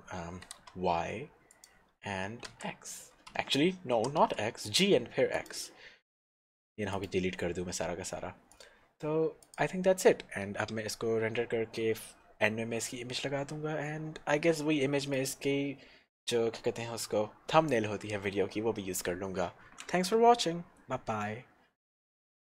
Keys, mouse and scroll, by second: 0.6 y, 1.7 click, 2.5 x, 3.6 Escape, 4.2 g, 4.4 x, 5.6 click, 9.5 click, 15.4 click.